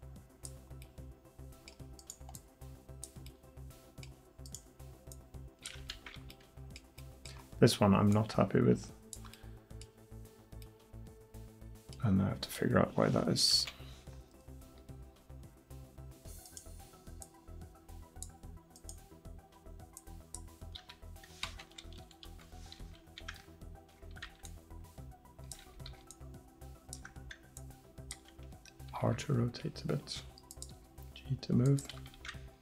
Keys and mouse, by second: 1.7 click, 2.4-4.1 middle drag, 4.0-5.1 drag, 5.1 middle click, 6.0 ctrl+z, 6.3 middle click, 6.5 click, 8.1-10.0 drag, 12.6 click, 13.6 KP_1, 21.6 KP_1, 22.3 KP_1, 22.8 a, 25.8 a, 29.0 r, 30.7 g, 32.0 a.